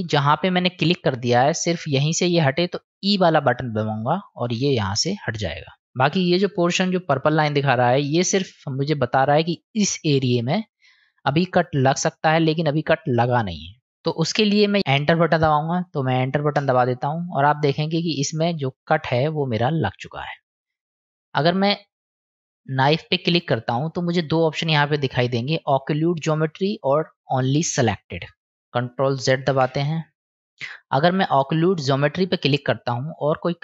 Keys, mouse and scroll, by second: 5.8-17.0 middle drag, 17.8-20.5 middle drag, 22.4 click, 29.5 ctrl+z, 31.6 click, 33.0-33.6 drag.